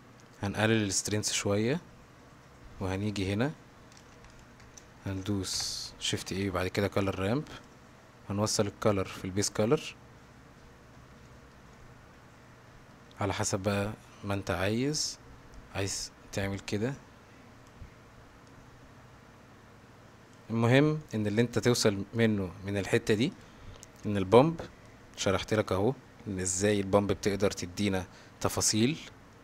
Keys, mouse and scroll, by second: 1.1-2.6 drag, 4.0 click, 5.0 shift+g, 5.1 shift+a, 6.4 o, 8.9-9.9 drag, 11.3-11.6 shift+middle drag, 11.8-13.0 middle drag, 15.6-17.7 drag, 18.5-20.4 drag, 21.0 middle click, 21.4 g, 23.0 middle click, 23.4 click, 24.9 click, 25.1-26.5 drag, 29.0-29.4 middle drag.